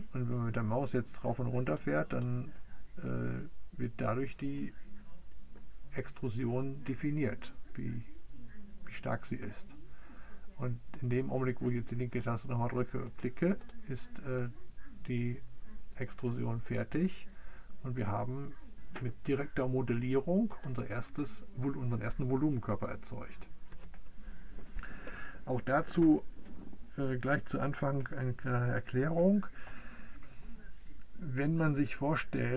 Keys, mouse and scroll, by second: 13.2-17.0 drag, 17.1 click, 18.0-20.4 middle drag, 18.4-32.5 right drag.